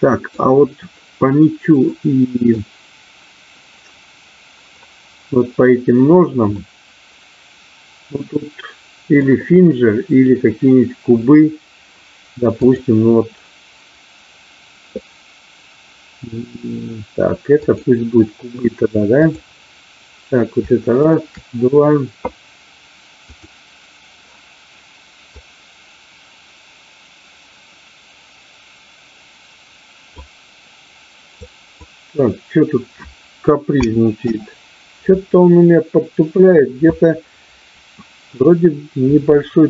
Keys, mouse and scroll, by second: 2.0 middle click, 6.6-9.1 middle drag, 12.5-17.8 drag, 19.2 click, 23.3 click, 25.3-35.8 drag.